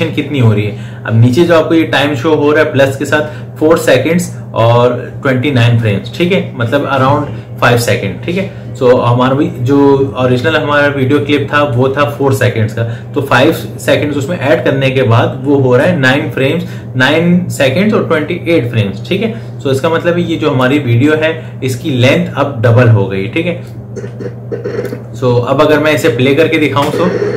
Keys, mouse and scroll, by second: 23.5-26.6 drag, 26.6 space.